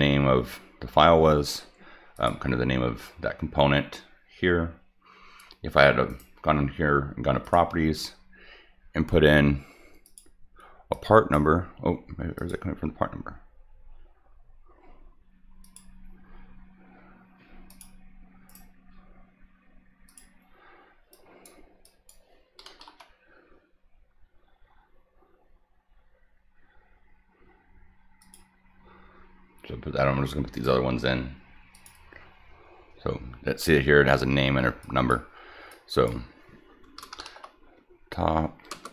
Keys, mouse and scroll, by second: 2.1 click, 6.1 right click, 7.4 click, 10.0 click, 10.9 click, 12.4 click, 15.6 click, 17.7 click, 18.5 right click, 20.1 click, 21.1 click, 21.8 click, 28.2 click, 30.5 right click, 31.7 click, 34.8 click, 35.7 click, 36.8-38.9 typing.